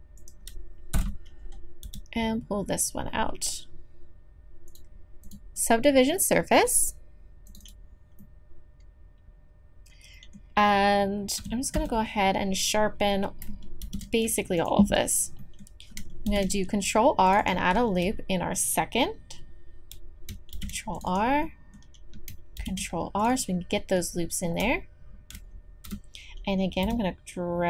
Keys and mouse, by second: 0.2 click, 0.9 KP_7, 1.8 g, 5.2-8.2 drag, 8.2-10.0 middle drag, 11.4 a, 11.7 a, 13.8 shift+e, 16.3 ctrl+r, 20.5 ctrl+r, 21.4-24.2 drag, 22.6 ctrl+r, 25.8 click, 25.9 KP_7, 26.8 g.